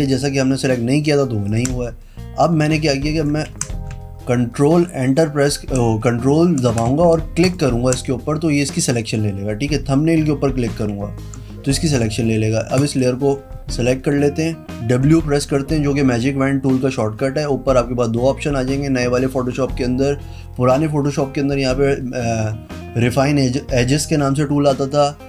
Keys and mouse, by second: 1.7 ctrl+click, 3.3 click, 3.7 ctrl+d, 7.6 ctrl+click, 12.9 click, 15.2 e.